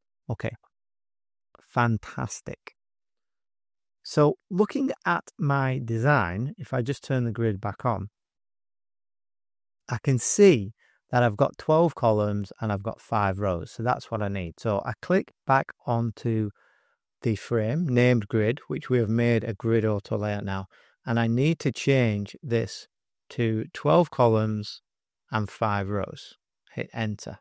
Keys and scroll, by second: 6.5 shift+g, 7.1 space, 7.6 space, 8.3 super+=, 8.8 space, 9.3 space, 13.8 space, 22.9-26.4 typing, 26.5 Return.